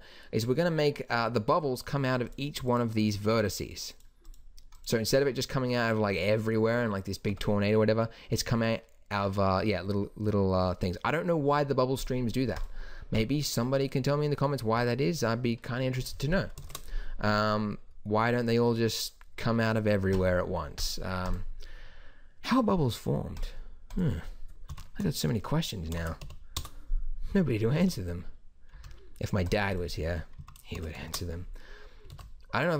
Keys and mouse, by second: 7.3 Tab, 12.0-14.7 drag, 16.0-19.0 drag, 27.8 alt+a, 28.7 Escape, 32.1 alt+a.